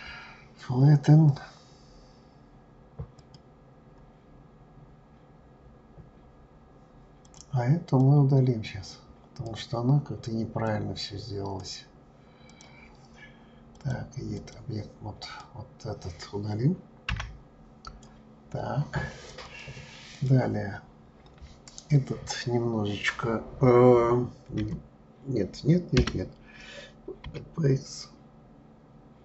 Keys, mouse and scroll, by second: 4.5-5.6 scroll down 4, 5.6-6.3 scroll down 1, 6.3-7.2 scroll down 3, 7.2 click, 8.0 click, 10.7 click, 12.5 click, 13.7-15.4 drag, 17.1 Delete, 19.4 click, 20.1 click, 27.2 s.